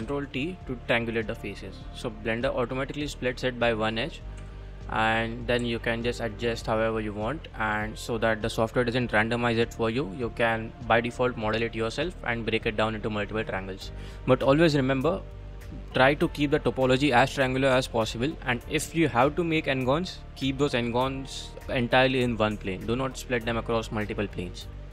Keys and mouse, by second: 0.0 ctrl+t, 0.9 middle click, 2.2 click, 2.6-3.8 middle drag, 4.2 click, 4.4 2, 4.9 click, 5.3 middle click, 5.6 g, 11.7 click, 12.3 click, 13.0 middle click.